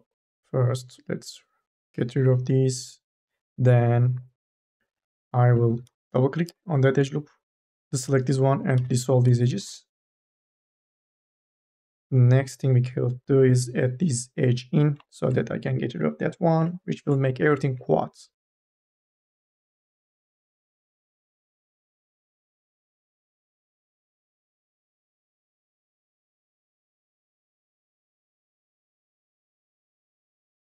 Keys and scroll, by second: 5.6 2, 6.1 e, 8.5-11.6 typing, 18.3 2, 18.8 1, 19.3 2, 19.5 e, 22.2 1, 23.0 m, 24.2 o, 25.9 e, 29.8 2.